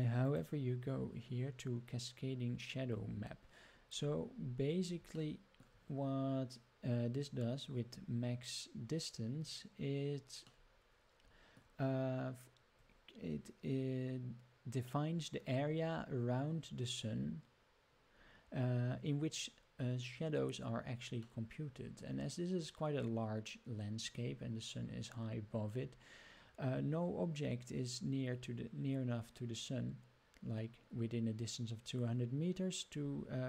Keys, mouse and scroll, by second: 0.2 click, 3.9-5.0 scroll down 9, 5.2-5.7 shift+middle drag, 10.7 middle click, 21.4-24.2 middle drag, 33.1-33.4 scroll up 9.